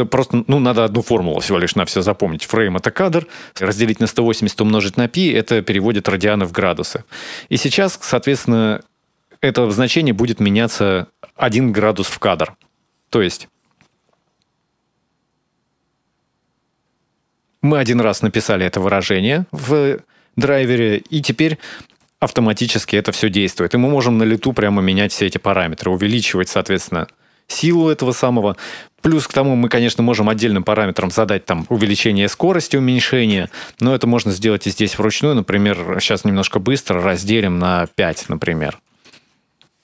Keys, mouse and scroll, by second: 13.7 space, 23.1 scroll up 1, 23.3 middle click, 24.1 click, 28.0 middle click, 29.2 space, 30.0 click, 39.7 space.